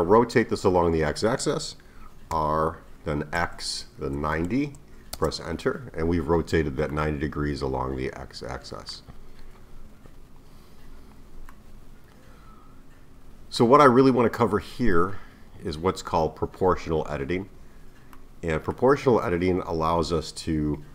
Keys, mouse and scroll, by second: 2.3 r, 6.9-9.9 middle drag, 11.5-14.5 middle drag, 14.6-15.2 scroll down 1, 15.2-18.2 scroll up 1, 18.2-20.9 middle drag.